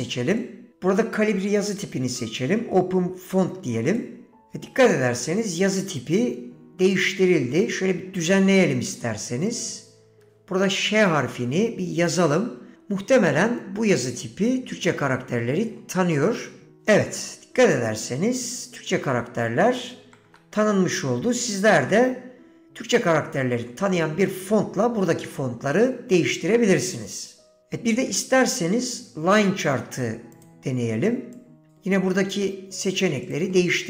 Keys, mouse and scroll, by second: 0.6 click, 7.4 Tab, 9.6 click, 10.3 BackSpace, 10.4 BackSpace, 16.9 ;, 16.9 e, 20.1 Tab, 28.1 shift+a.